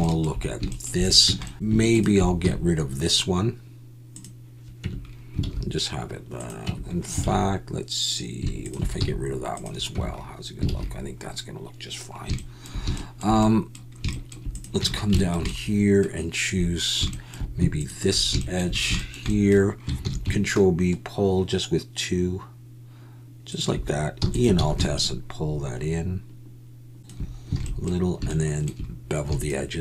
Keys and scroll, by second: 1.2 Tab, 1.5 alt+a, 2.4 x, 4.8 Tab, 5.4 alt+a, 6.6 Tab, 7.2 alt+a, 7.3 Tab, 7.3 alt+a, 9.0 x, 9.9 Tab, 10.7 alt+a, 14.8 Tab, 20.0 ctrl+b, 24.2 e, 24.5 alt+s, 27.6 alt+a.